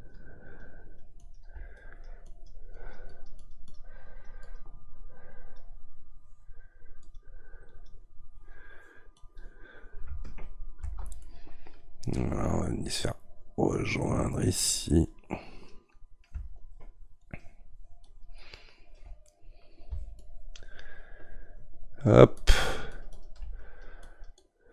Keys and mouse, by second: 10.8 ctrl+z, 11.2-13.3 middle drag, 13.3-19.3 drag, 19.3 middle click, 20.2-24.7 shift+drag.